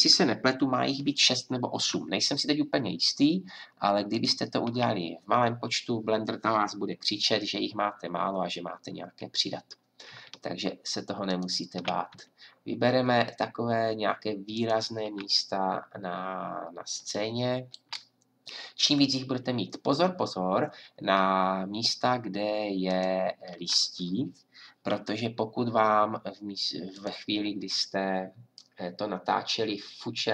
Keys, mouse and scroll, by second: 13.0-16.2 drag, 22.9-24.5 drag, 24.9 g.